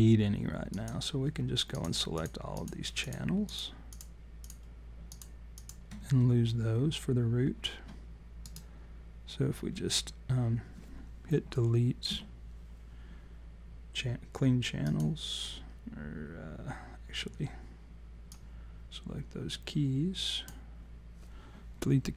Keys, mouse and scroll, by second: 0.7 click, 1.7-8.4 shift+click, 8.4 right click, 12.0 Delete, 18.3 click.